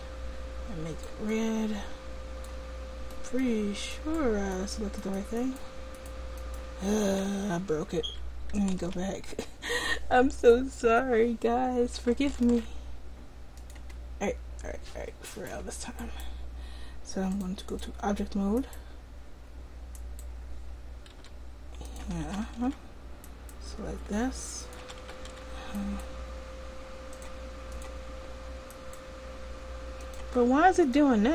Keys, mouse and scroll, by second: 2.7 click, 7.6 ctrl+z, 10.7 ctrl+alt+z, 12.4 ctrl+alt+z, 15.3-17.8 drag, 17.9 click, 20.0-21.9 drag, 21.2 r, 22.1 a, 22.3 a, 22.7 alt+r, 24.1 r, 24.9 a, 25.1 a, 25.4 alt+r.